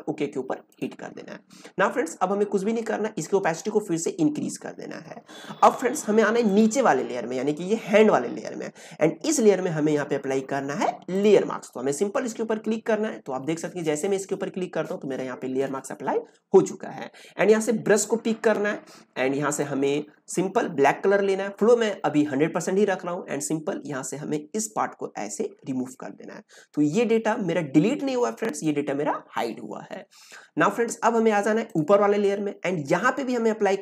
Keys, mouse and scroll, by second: 0.6 click, 3.2-6.4 drag, 11.1 click, 17.9 click, 23.3-31.6 drag.